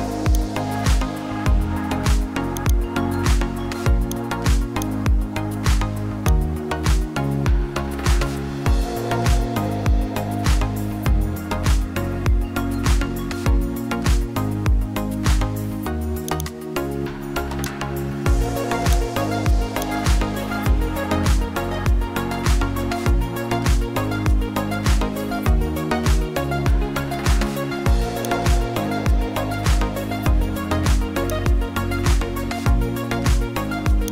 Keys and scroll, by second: 11.3 alt+BackSpace, 23.0 alt+BackSpace.